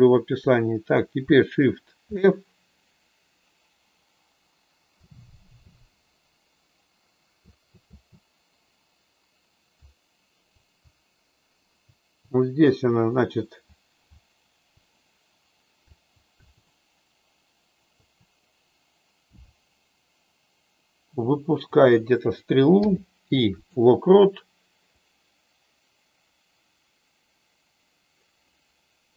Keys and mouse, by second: 2.0 shift+f, 4.9 Up, 5.4 Up, 5.7 Up, 7.4 Left, 7.9 Left, 9.7 Right, 11.8 Up, 14.3 Down, 15.9 Up, 16.3 Up, 18.1 Up, 19.3 Right, 21.7 click, 22.7 i, 25.0-28.3 drag.